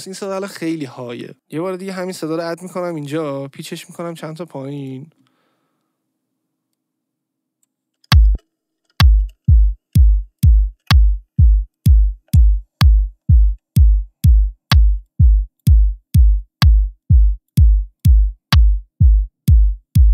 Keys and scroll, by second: 8.0 space, 11.4 ctrl+e, 12.2 Delete.